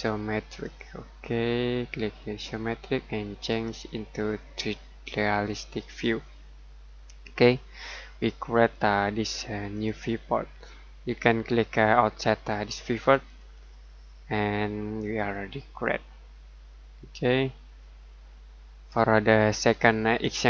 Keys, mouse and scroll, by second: 0.6 click, 8.6 click, 19.6 middle click.